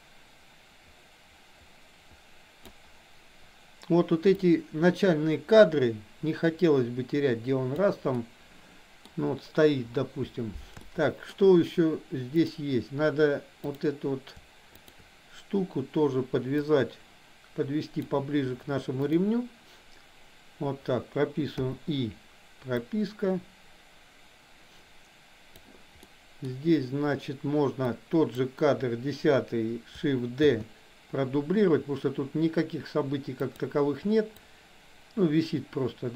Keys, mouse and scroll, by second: 4.4-7.9 drag, 8.2 middle click, 10.9-11.3 shift+middle drag, 13.7 click, 14.8 shift+click, 16.8-18.2 drag, 19.1 click, 22.9-25.7 drag, 26.1-26.4 middle drag, 27.9-28.3 drag, 30.4 shift+d, 34.4-36.1 drag.